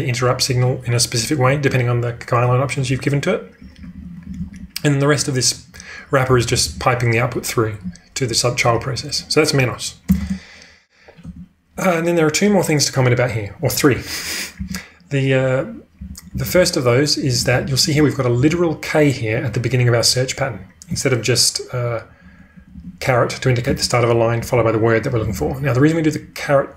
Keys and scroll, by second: 1.3-1.6 typing, 2.8-3.9 typing, 4.9 typing, 6.2 k, 6.4 k, 6.6 k, 10.1 space, 10.2 space, 11.2 j, 14.5 w, 16.3-17.9 typing, 20.3 typing, 22.4-25.3 typing.